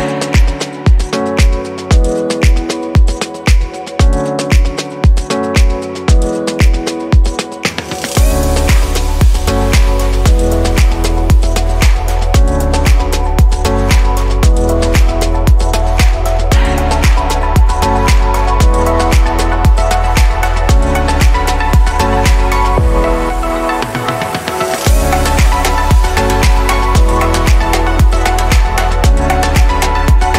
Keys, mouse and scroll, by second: 0.0 click, 0.5-1.4 middle drag, 1.4-4.2 scroll up 2, 4.2-10.0 middle drag, 10.0 click, 11.5 ctrl+s, 12.9 shift+s, 15.4 shift+a, 16.7 click, 25.0-25.9 middle drag, 25.9 s, 28.7-30.3 middle drag.